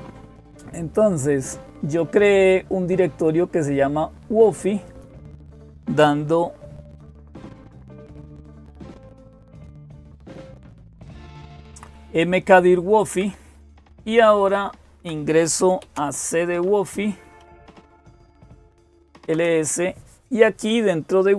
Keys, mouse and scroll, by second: 0.0-21.3 typing, 2.5-5.5 drag, 7.2 Up, 7.4 Up, 7.7 Up, 8.0 Up, 8.3 Up, 8.9 Up, 9.2 Up, 9.4 Up, 9.6 Up, 9.8 Up, 10.0 Up, 10.3 Up, 11.2 Down, 11.3 Down, 11.5 Down, 12.9 Down, 13.1-14.9 Down, 17.9 Return.